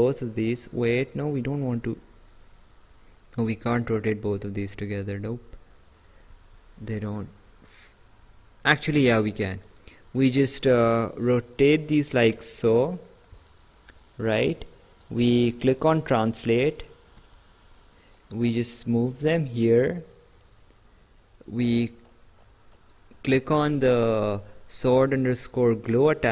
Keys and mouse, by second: 6.3 ctrl+z, 8.8 click, 15.0 click, 18.1 click, 21.5 click, 25.4 right click.